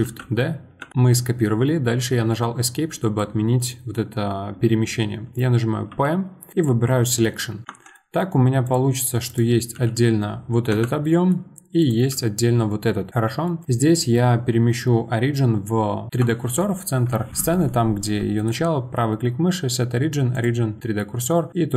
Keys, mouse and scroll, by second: 0.0 shift+d, 0.9-2.6 middle drag, 2.9-5.9 middle drag, 5.9 p, 7.9-8.6 middle drag, 8.6 click, 9.3 click, 9.7 g, 11.0-11.8 middle drag, 11.8 click, 13.0 scroll up 1, 13.1-16.1 middle drag, 18.4-20.8 right drag, 20.8-21.5 middle drag, 21.5 click.